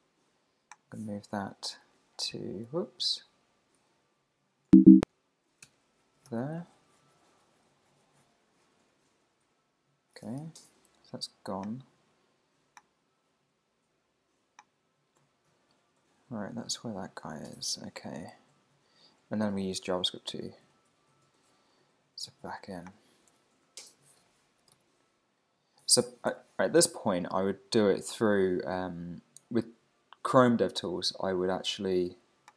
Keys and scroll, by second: 2.1 shift+super+Down, 3.0 Up, 3.3 Down, 4.0 ctrl+super+Down, 4.6 ctrl+super+[, 5.6 super+s, 5.7 super+Tab, 6.3 super+r, 10.4 alt+super+i, 16.4 Right, 24.2 super+t, 25.9 Escape, 26.3 super+Tab.